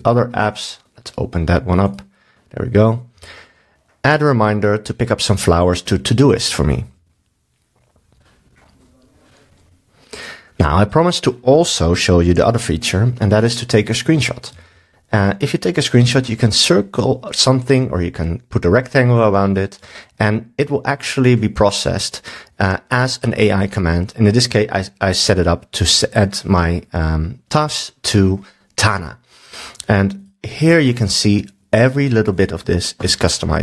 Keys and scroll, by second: 3.1 super+s, 14.5 super+w.